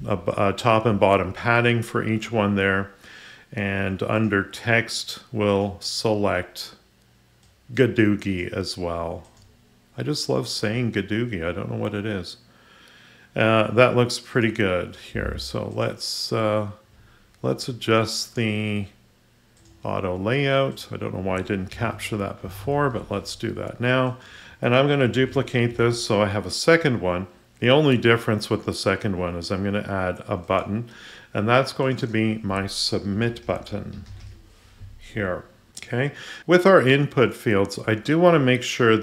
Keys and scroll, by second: 25.1 ctrl+d.